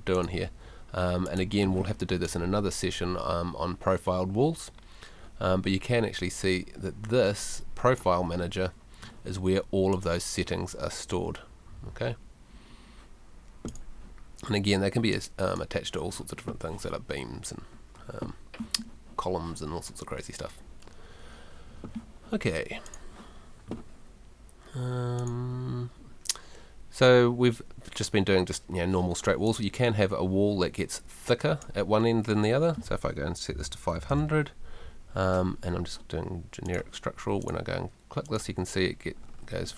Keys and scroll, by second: 33.5 5, 33.9 0.